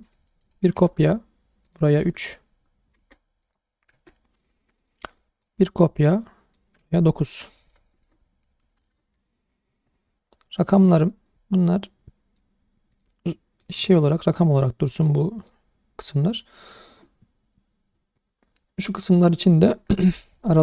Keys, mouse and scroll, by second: 0.0 scroll down 2, 0.3 shift+middle drag, 0.8 shift+d, 1.7 click, 2.0 Tab, 3.0 BackSpace, 3.1 3, 3.9 Tab, 4.6 shift+d, 4.8-5.4 right drag, 5.4 click, 6.8 Tab, 8.0 BackSpace, 8.6 9, 9.7 Tab, 11.8 click, 12.9 click, 13.6 click, 14.1-14.9 scroll up 1, 14.9 click.